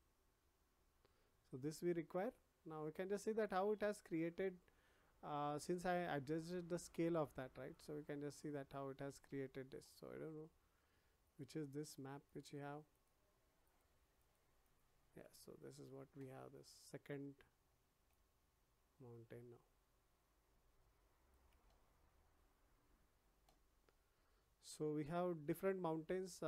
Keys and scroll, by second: 9.0 ctrl+z.